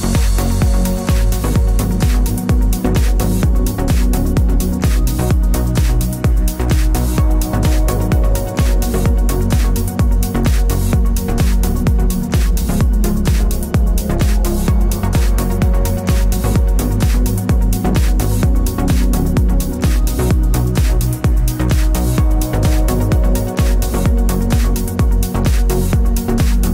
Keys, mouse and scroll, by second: 2.8 KP_6, 3.8 BackSpace, 4.1 KP_7, 5.0 KP_6, 5.1 KP_Enter, 6.7 click, 7.2 KP_7, 7.4 KP_0, 7.6 KP_Enter, 9.0 click, 9.8 KP_4, 9.9 KP_0, 10.0 KP_Enter, 10.8 click, 13.8 alt+shift+click, 15.4 click, 16.2-17.3 typing, 17.3 Return, 18.5 click, 19.4 KP_2, 19.8 KP_0, 20.0 KP_Enter, 21.2 click, 22.5 KP_Enter, 23.2 ctrl+=, 24.6 click, 25.7 click.